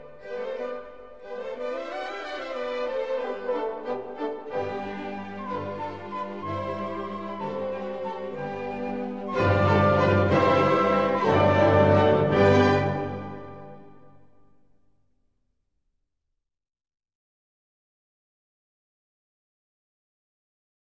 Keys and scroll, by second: 6.9 g.